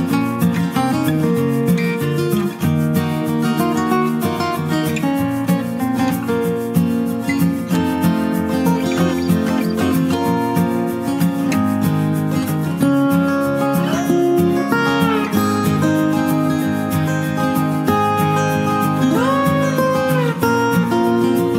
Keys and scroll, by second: 21.2 ctrl+space.